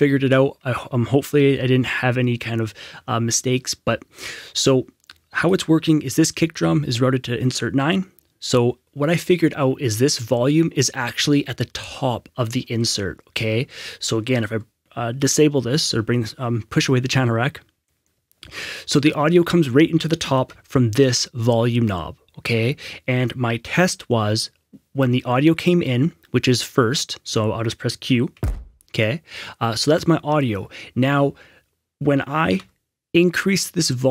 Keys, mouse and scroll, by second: 5.4 Escape, 5.4 click, 15.7 click, 17.1 F6, 20.4 F6, 23.5 F6, 28.2 F6, 28.3 q, 32.5 q, 32.5 F6.